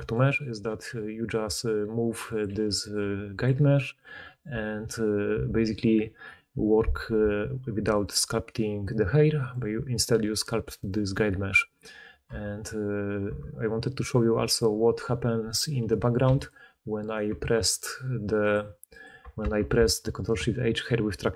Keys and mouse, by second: 1.4 r, 2.4 g, 2.9 r, 3.4 g, 4.4 Tab, 4.5-8.0 middle drag, 8.0 click, 8.0-9.3 middle drag, 9.3 click, 9.4-10.6 middle drag, 10.0 g, 12.2 Tab, 13.2 Tab, 16.2 x, 17.0 click, 19.5 ctrl+shift+h.